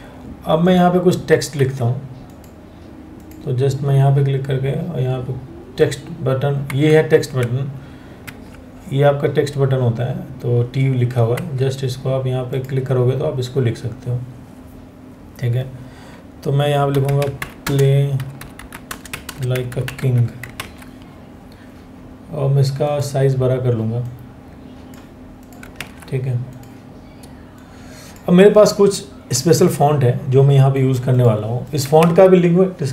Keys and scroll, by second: 1.2 Escape, 6.3 Escape, 7.9 ctrl+1, 11.0 Escape, 11.2 ctrl+1, 16.5-19.6 typing, 20.2 ctrl+a, 25.5 ctrl+a.